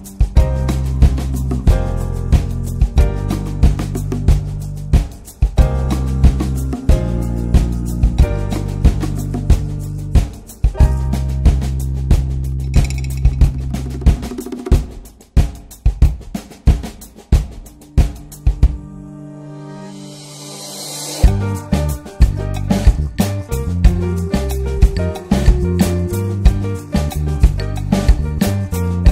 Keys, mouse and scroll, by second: 3.6 ctrl+shift+click, 4.7 alt+middle click, 7.3-10.8 drag, 10.8-11.7 middle drag, 13.5 click, 14.4 ctrl+z, 16.2-19.9 drag, 21.7 ctrl+shift+click, 22.7-23.5 drag, 25.1-25.5 scroll up 1, 25.5-25.9 scroll down 2, 25.9 alt+middle click, 26.5-27.1 scroll up 2, 28.0-29.1 drag.